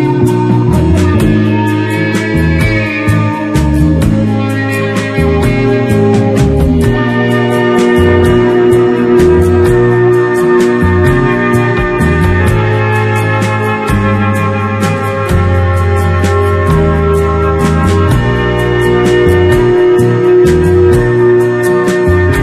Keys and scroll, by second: 2.4 space, 2.9 w, 5.0 ctrl+m, 8.0 Return, 8.8 ctrl+KP_Subtract, 10.0 space, 11.0 ctrl+y, 11.1 ctrl+space, 11.8 ctrl+space, 14.6 Return, 19.4 space, 20.0 w, 20.3 Return, 21.6 f.